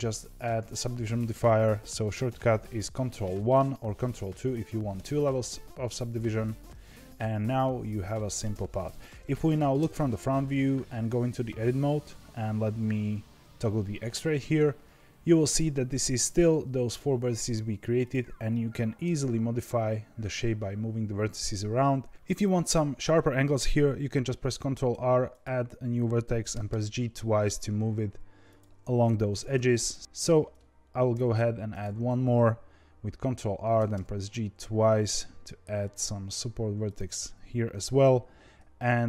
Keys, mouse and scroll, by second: 0.7-3.5 drag, 3.5 ctrl+1, 6.8-9.7 middle drag, 9.7 KP_1, 11.0 Tab, 13.4 z, 15.4 click, 16.0 click, 17.2 scroll up 2, 18.0 click, 19.0 g, 21.5-22.1 scroll down 1, 24.5 ctrl+r, 26.5 g, 29.5 ctrl+r, 30.0 ctrl+z, 31.0 ctrl+r, 33.7 g, 38.9 ctrl+r.